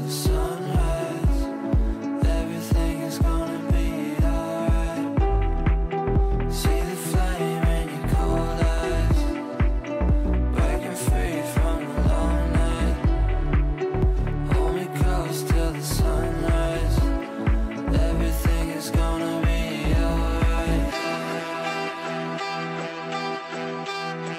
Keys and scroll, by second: 2.7 shift+F2, 3.0 F3, 5.7 shift+F2, 6.0 Escape, 17.3 shift+F2.